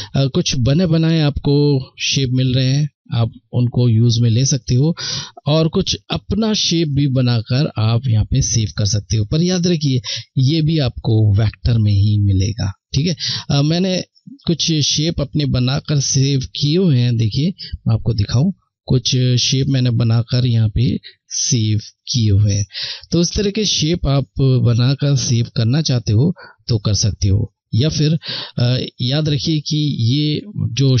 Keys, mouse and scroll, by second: 0.6 click, 13.5 click, 16.7-17.2 scroll down 1, 19.7 click.